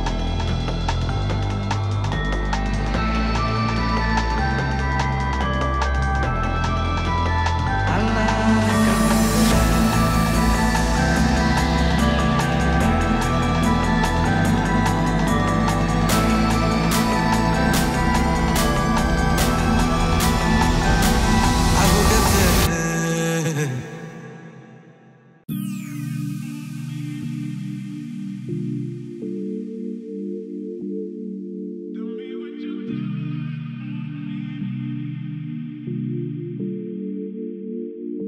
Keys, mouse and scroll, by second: 3.9 scroll down 1, 4.5 middle click, 6.5 click, 6.9 right click, 7.8 click, 10.5 Return, 10.8-12.6 typing, 13.3 ctrl+space, 13.8 c, 14.0 c, 14.2 space, 16.0 Down, 16.3 Return, 19.0-20.5 drag, 20.7 scroll down 1, 21.5 scroll up 1, 22.4-24.6 drag, 25.8 scroll down 1, 26.9 click, 29.1-33.2 drag, 34.4 ctrl+space, 35.0-36.3 typing, 36.9-38.2 drag.